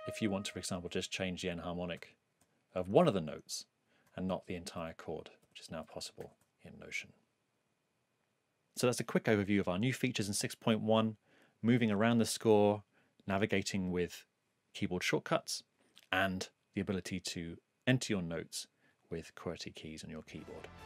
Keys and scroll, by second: 0.0 shift+Down, 1.9 shift+e, 4.3 shift+e.